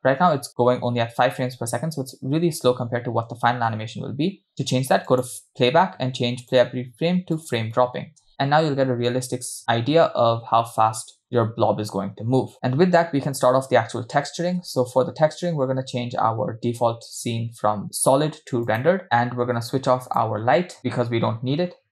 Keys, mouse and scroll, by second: 3.0 space, 5.1 click, 7.8 click, 8.3 space, 14.9 space, 19.0 click, 20.1 click, 20.8 click.